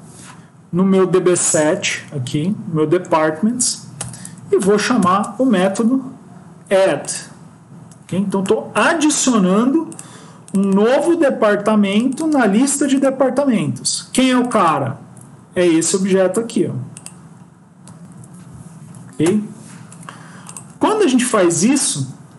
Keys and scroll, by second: 15.8 ctrl+c, 17.7 ctrl+v, 18.7 End.